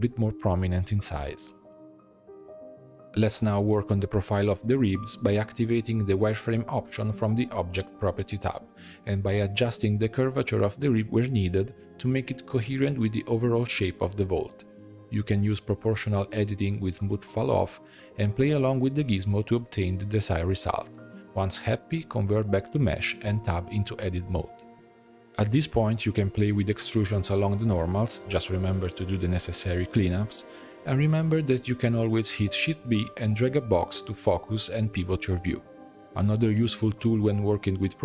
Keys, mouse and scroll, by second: 1.7-2.2 drag, 2.2 h, 2.9 click, 3.9 click, 5.0 click, 5.4-6.2 middle drag, 6.2-6.6 scroll down 3, 6.6-8.0 shift+middle drag, 8.0 Tab, 9.3 click, 10.3 click, 11.0 g, 15.1-17.2 drag, 17.2 g, 21.2 click, 21.8-24.1 drag, 24.1 middle click, 24.8 Tab, 25.1 alt+click, 25.6 middle click, 26.6 alt+shift+click, 27.3 alt+e, 29.8 3, 30.2 click, 31.0 shift+click, 31.7 x, 32.5-35.1 middle drag, 35.1 shift+b, 36.5 middle click, 36.6 ctrl+r, 36.6 middle click, 37.2 click, 37.4 alt+s, 37.9 alt+click.